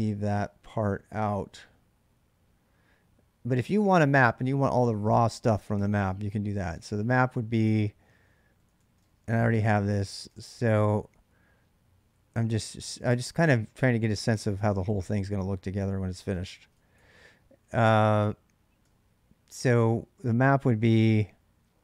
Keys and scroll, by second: 3.6-4.0 k, 5.6-12.7 typing, 5.8 Return, 12.9 ctrl+[, 13.0 ctrl+j, 13.8-18.6 typing, 19.4 Return.